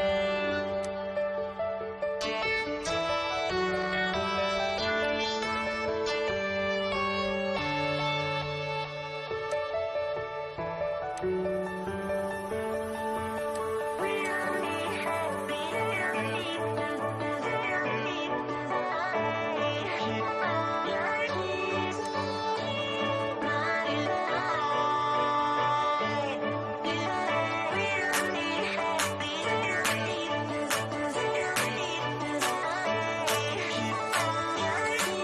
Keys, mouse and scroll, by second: 0.8 scroll down 1, 1.6-3.9 shift+middle drag, 3.9 click, 4.6 scroll down 1, 8.4 click, 12.5 click, 14.7 scroll up 1, 15.4-17.6 shift+middle drag, 17.6-18.1 scroll up 1, 21.0 click, 22.9-24.3 scroll up 1, 26.5 click, 27.2-27.6 scroll up 1, 28.7-32.4 shift+middle drag, 32.4 click.